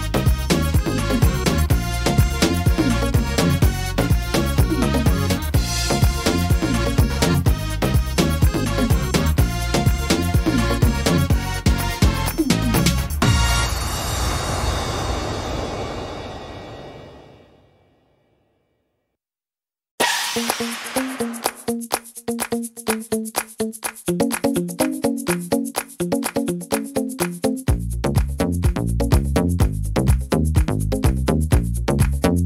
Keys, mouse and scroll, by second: 0.1 ctrl+z, 0.7 right click, 1.9 shift+d, 2.2 right click, 3.9 shift+e, 5.2 right click, 5.9 shift+e, 7.9 g, 9.8 click, 12.4 click, 14.6 right click, 16.0 shift+e, 17.9 click, 19.8 click, 22.0 right click, 23.2 shift+e, 24.5 click, 25.5 e, 27.0 click, 29.2 middle click, 30.0 shift+middle click, 30.4 middle click, 30.8-32.2 scroll down 3, 31.6 middle click.